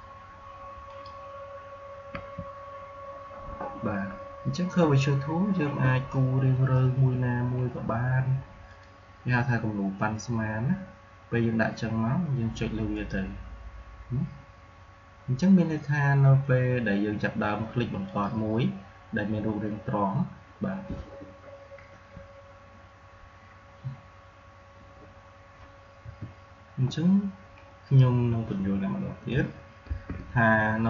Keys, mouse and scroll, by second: 2.0 Escape, 8.6 click, 12.8 click, 18.0 click, 21.8 Escape, 24.7 v, 26.0 Delete, 29.2 shift+Num_Lock, 29.3 Delete, 29.8 shift+'.